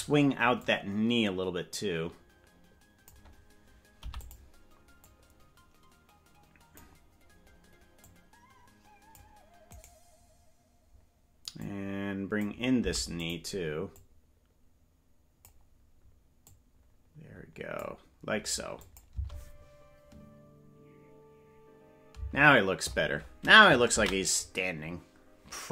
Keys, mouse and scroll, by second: 0.6-3.2 drag, 4.0 i, 5.1-6.9 drag, 8.0-9.8 drag, 9.8 right click, 11.6 click, 12.7 i, 14.0-15.5 drag, 16.4-18.0 drag, 18.8 click, 19.1 space, 22.2 space.